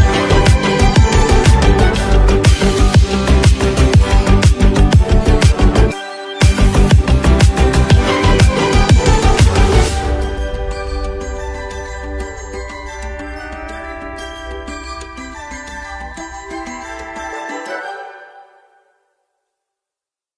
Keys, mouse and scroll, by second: 4.8 click, 11.2 click, 14.0 click, 17.6-20.3 drag.